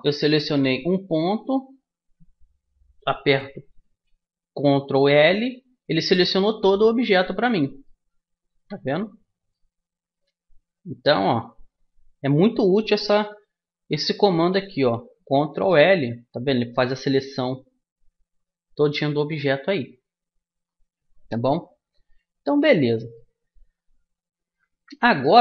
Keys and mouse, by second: 0.5-2.4 right drag, 4.6 ctrl+l, 6.2-11.0 middle drag, 8.5 KP_Decimal, 11.2 middle click, 13.2 a, 13.9-15.6 right drag, 15.6 ctrl+l, 22.4 a, 23.1-24.7 drag, 24.7-25.4 middle drag.